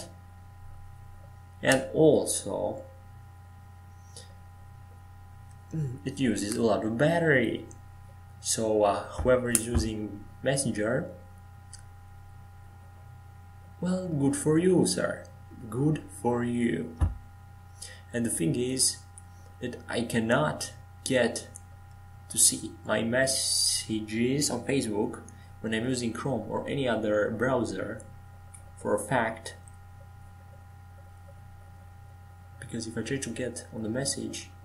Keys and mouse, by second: 8.8-10.9 middle drag, 12.7-13.7 right drag, 13.7 Tab, 16.9 click, 23.4-27.4 drag, 23.4-27.4 right drag.